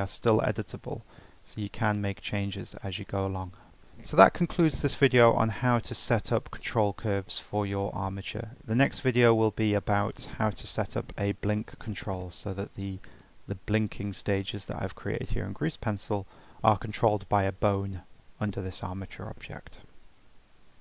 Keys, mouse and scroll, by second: 1.1 scroll down 3, 1.5-1.8 scroll up 1, 1.8-2.2 shift+middle drag, 2.2-2.5 scroll up 2, 2.7-3.1 scroll down 3, 3.1-3.6 scroll up 2, 3.6-6.1 shift+middle drag, 13.0-16.1 drag.